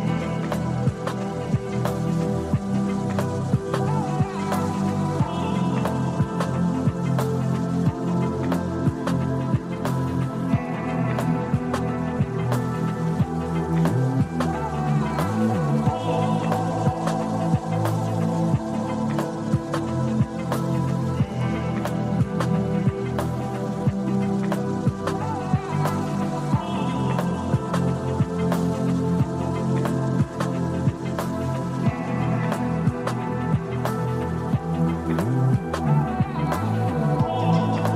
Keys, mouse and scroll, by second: 1.2 click, 4.8 click, 6.7-8.1 drag, 8.5-8.8 scroll up 2, 10.3-11.4 drag, 13.9 click, 15.0-16.9 scroll down 1, 17.6-18.8 drag, 21.7-22.6 drag, 24.2 click, 26.4-29.5 typing, 29.3 click, 30.8-33.2 drag, 33.5-37.9 typing.